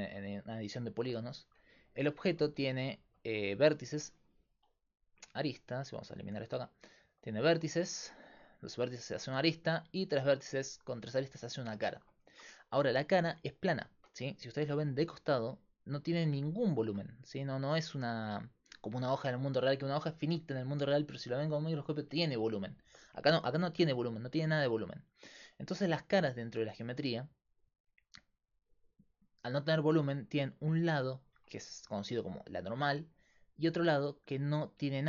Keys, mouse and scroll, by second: 1.4 Tab, 2.4 a, 3.3 a, 3.7-6.4 right drag, 6.2 ctrl+x, 6.9 right click, 12.3 a, 14.8 f, 24.5 middle click, 26.4 ctrl+Tab, 33.6 middle click, 34.4 a.